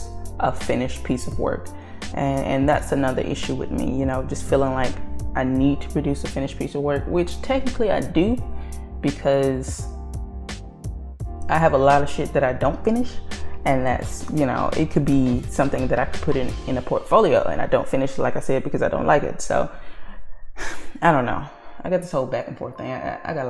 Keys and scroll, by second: 12.4 ctrl+z.